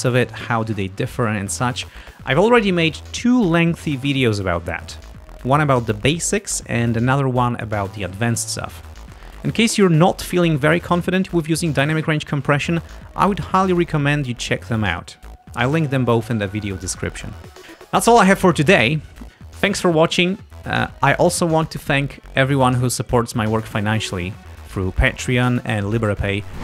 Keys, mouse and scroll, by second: 0.5 scroll up 2, 19.3 scroll up 2, 19.7-20.4 scroll down 2, 20.7-21.7 scroll up 4, 22.6 scroll down 2, 25.4 scroll up 2.